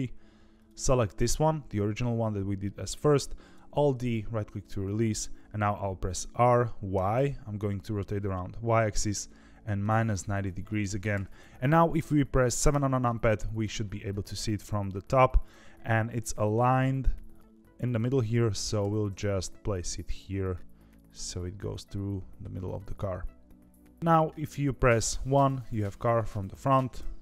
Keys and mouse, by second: 0.5 click, 3.5 alt+d, 6.1 r, 12.6 KP_7, 18.8 g, 25.0 KP_1, 26.9 KP_3.